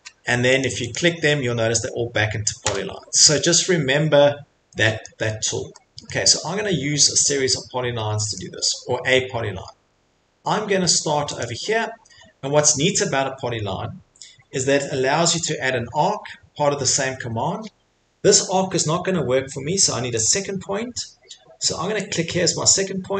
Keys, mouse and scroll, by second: 0.6 click, 0.9 click, 2.6 Delete, 5.0-5.6 scroll, 6.1 scroll, 6.3 middle click, 6.4 middle click, 8.3 click, 9.3 middle click, 9.5 middle click, 11.4 click.